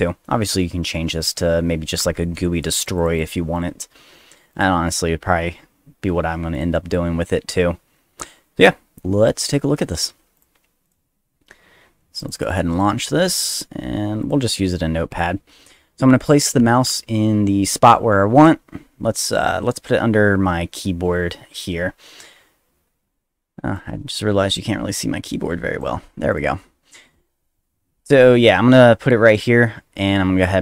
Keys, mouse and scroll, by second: 2.7 click, 2.9 click, 3.1 click, 3.5 click, 4.5 click, 6.5 click, 10.3 click, 10.8 click, 12.2 click, 12.3 click, 12.5 click, 14.2 click, 15.1 click, 23.7-25.8 drag, 26.3 click.